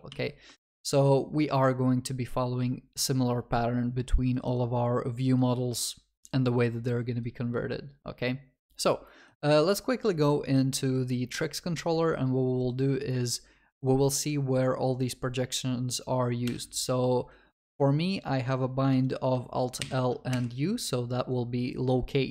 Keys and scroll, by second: 0.2 ctrl+s, 3.5 ctrl+s, 16.5 ctrl+b, 20.7 alt+F7.